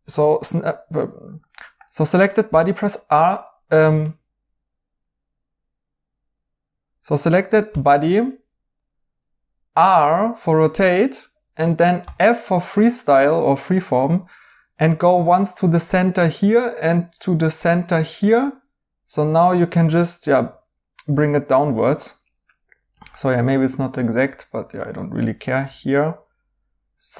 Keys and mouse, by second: 2.4-3.0 typing, 5.7 Escape, 7.6 typing, 12.0 f.